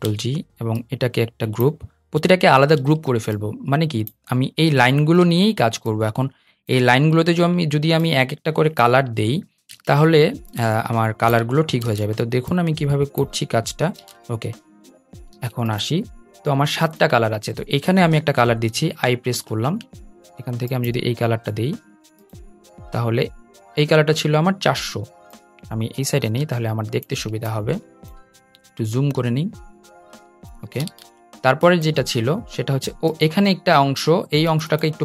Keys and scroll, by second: 2.6 super+g, 5.0 super+g, 6.2 super+g, 7.1 super+g, 8.4 super+g, 9.5 super+g, 10.4 super+g, 11.6 super+g, 13.7 super+g, 15.0 super+y, 19.8 i.